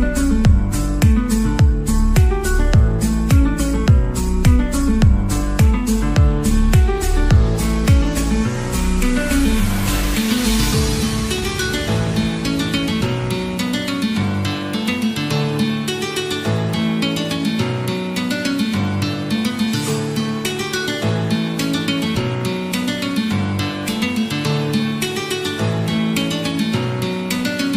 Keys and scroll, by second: 2.0 [, 2.2 [, 3.2-4.0 ].